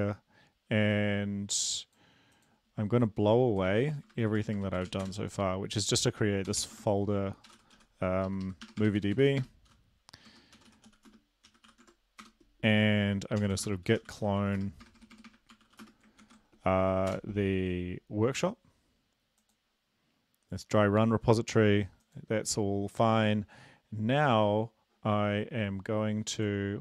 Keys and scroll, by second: 4.5 BackSpace, 6.0 Return, 6.0 typing, 7.2 typing, 9.0-13.1 typing, 14.5-16.5 typing.